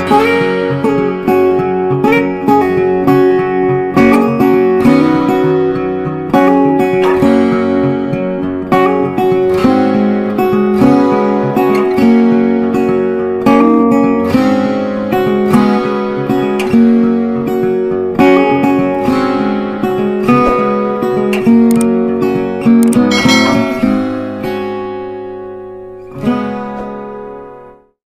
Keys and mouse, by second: 13.6 ctrl+g, 14.8-20.5 drag, 21.1 click.